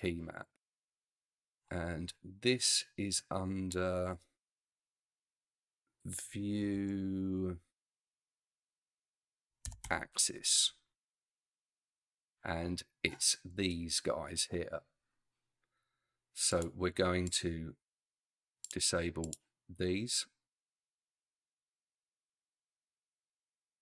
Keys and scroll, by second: 4.5 v, 6.6 i, 6.8 e, 8.5-9.8 typing.